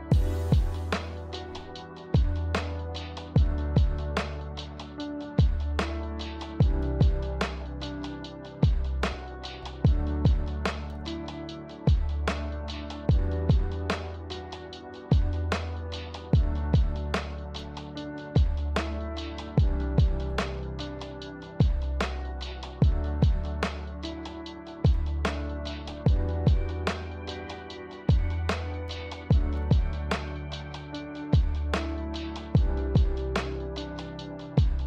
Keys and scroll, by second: 0.0-0.1 typing, 1.4 d, 2.3 z, 20.9 a, 34.3 ctrl+c.